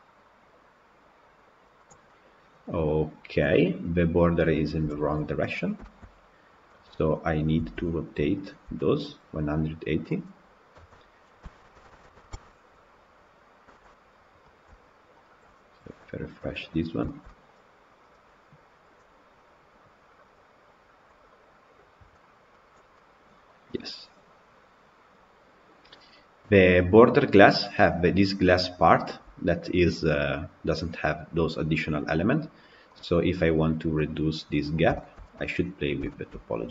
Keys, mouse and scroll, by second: 2.0-3.1 middle drag, 3.1-4.4 scroll up 2, 4.4-5.3 scroll down 4, 5.3-6.3 middle drag, 6.3 scroll down 1, 6.6-7.2 middle drag, 7.2 click, 7.6 Tab, 8.4 alt+click, 10.0 click, 10.6 a, 11.6 r, 13.7 Tab, 14.4 drag, 15.2 click, 15.8 KP_Decimal, 16.3 middle click, 16.7 scroll up 1, 16.9-22.3 shift+middle drag, 22.3-22.8 drag, 22.8-25.7 middle drag, 25.7 scroll up 1, 32.8-34.5 middle drag, 34.5-34.8 scroll down 5, 34.8 shift+middle click, 35.7 scroll up 2, 35.9-36.3 shift+middle drag, 36.3-36.7 scroll up 1.